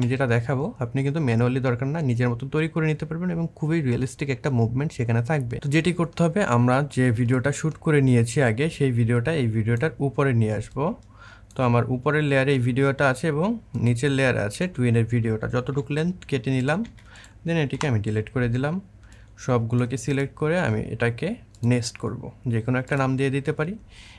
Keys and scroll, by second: 15.6 c, 16.6 v, 17.5 Delete.